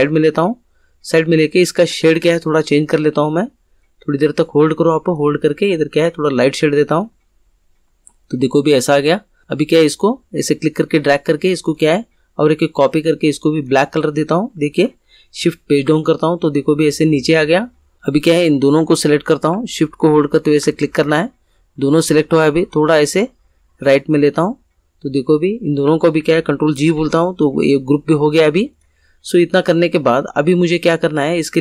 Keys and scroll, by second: 15.4 shift+Page_Down, 26.9 ctrl+g.